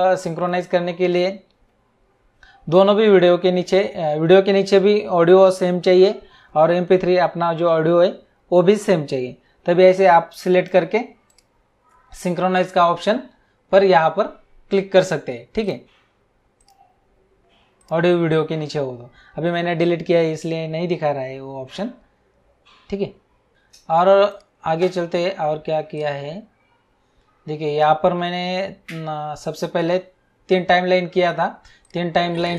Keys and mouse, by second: 10.3 click, 11.2 right click, 15.6 click, 17.8 click, 24.2 click, 25.9 click, 31.8 click.